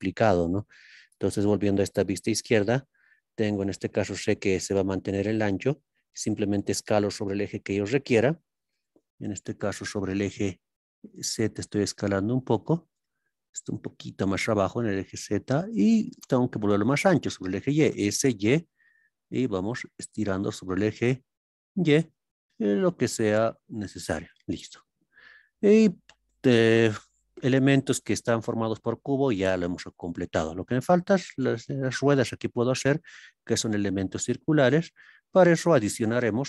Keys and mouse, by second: 1.0 ctrl+KP_3, 6.8 z, 10.4 z, 14.4 z, 18.2 y.